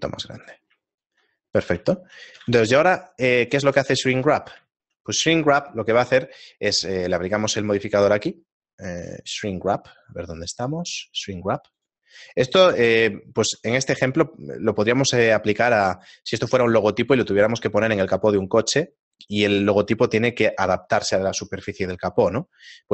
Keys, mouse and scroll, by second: 0.4 click, 0.8 shift+middle click, 1.6 right click, 1.9 shift+middle click, 2.4 g, 3.7 z, 4.2 shift+middle click, 4.8 shift+middle click, 8.2 click, 11.8 click, 13.3 shift+middle click, 14.4 scroll up 2, 14.4 z, 15.5 shift+middle click, 17.0 shift+middle click, 22.0 shift+middle click.